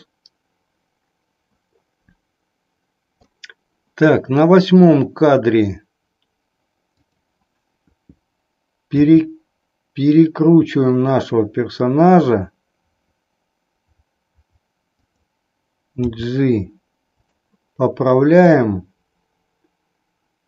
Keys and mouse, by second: 6.8-8.1 drag, 8.8 r, 15.1 click, 15.9 g, 18.3-19.3 drag.